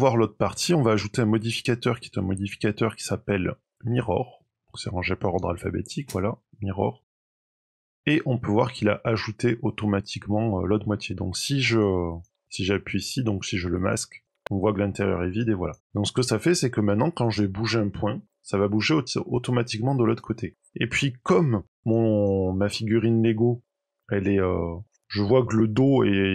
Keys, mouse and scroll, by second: 0.7 click, 7.7 click, 8.1 scroll up 1, 8.1 middle click, 9.7 middle click, 11.6 click, 12.0 click, 12.3-13.0 click, 12.8 click, 13.3 click, 14.0 click, 14.3 middle click, 15.5 click, 15.8 middle click, 16.3 Tab, 17.0 click, 18.2 g, 20.5 scroll down 3, 20.7 middle click, 21.8 click, 22.1 click, 23.9 middle click, 24.5-25.0 scroll up 3, 24.8 middle click, 26.1 middle click.